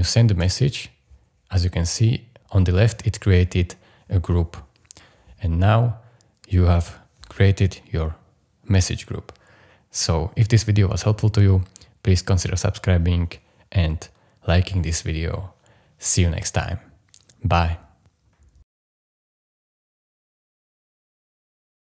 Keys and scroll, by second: 0.4 Return.